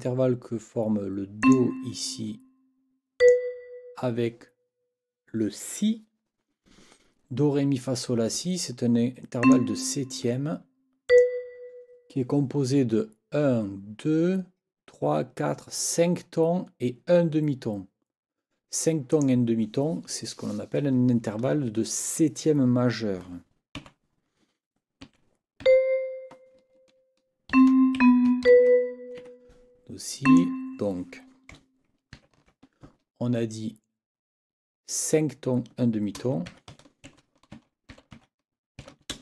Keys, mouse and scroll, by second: 1.4 click, 3.2 ctrl+click, 9.4 click, 11.1 shift+click, 19.1 click, 23.8 n, 25.0 KP_6, 25.6 c, 27.5 ctrl+Down, 28.0 ctrl+b, 28.4 ctrl+Up, 29.2 Escape, 30.2 click, 32.2 ctrl+t, 36.2-37.2 typing, 38.8 shift+t, 39.1 shift+space.